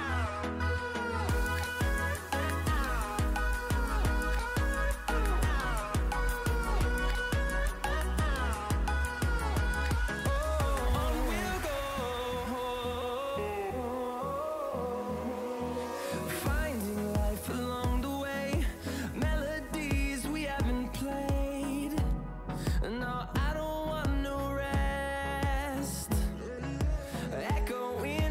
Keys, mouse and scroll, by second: 0.3 click, 3.0 scroll up 1, 3.8 click, 5.4 Up, 17.4 Up, 24.4 scroll down 1, 25.4-28.3 drag.